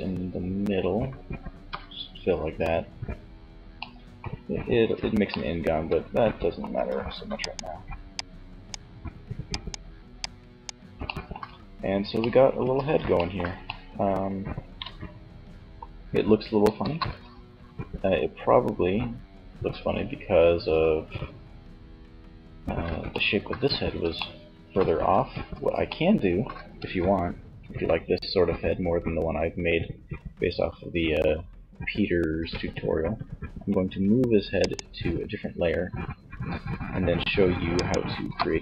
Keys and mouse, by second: 0.7 f, 1.7-3.7 middle drag, 3.7 Tab, 5.7 Tab, 11.4 Tab, 15.8 KP_3, 31.5 m, 37.0-38.6 drag, 38.0 KP_1.